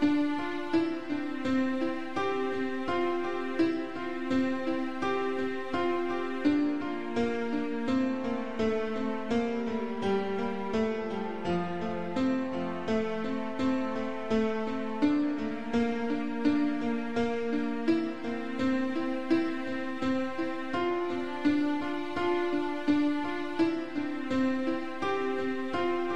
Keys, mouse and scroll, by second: 0.1 7, 1.2 7, 1.4 b, 1.6 click, 3.0 click, 4.2 shift+middle click, 4.5 shift+middle click, 4.5 scroll up 2, 5.1 g, 8.0 click, 8.1 click, 8.3 middle click, 9.1-9.4 scroll down 3, 9.4 shift+middle click, 9.6 shift+middle click, 9.9 click, 10.0 double click, 10.5-11.1 typing, 10.8-11.1 scroll up 3, 11.8 Escape, 12.8 click, 13.2 shift+middle click, 13.5 scroll down 2, 13.8 g, 14.9 click, 15.8 click, 16.1 g, 16.4 scroll down 1, 17.0 click, 17.3 middle click, 18.5-18.9 scroll down 2, 19.3 shift+middle click, 20.4 click, 20.5 click, 21.3 shift+click, 22.3 7, 23.5 g, 25.1 click, 25.4 scroll down 2, 25.8 shift+middle click, 26.0 middle click.